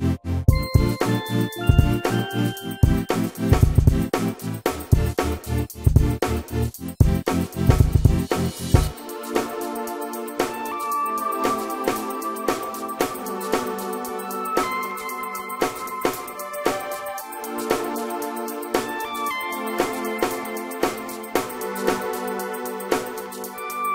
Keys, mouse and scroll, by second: 6.1 space, 8.7 Escape, 17.3 shift+middle click, 19.2 Delete, 20.2 p, 22.3 shift+middle click.